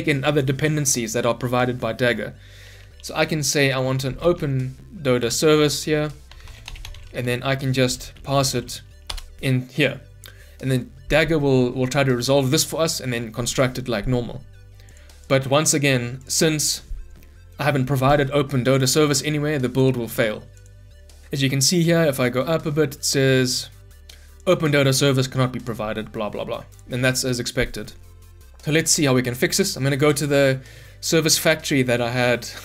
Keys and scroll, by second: 5.3 Return, 7.4 Escape, 9.0 Return, 16.3 ctrl+F9.